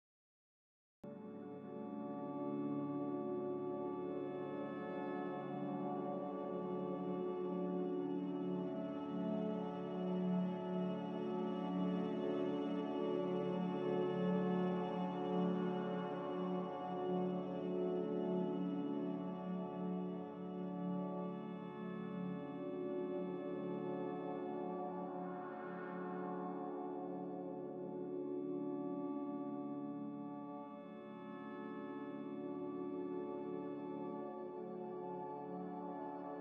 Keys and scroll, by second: 0.0 1, 6.0 2, 8.5 q, 9.1 ctrl+j, 11.7-12.5 typing, 17.3 1, 21.4-24.0 typing, 25.5-26.5 typing, 28.3-29.9 typing, 32.4-33.3 typing.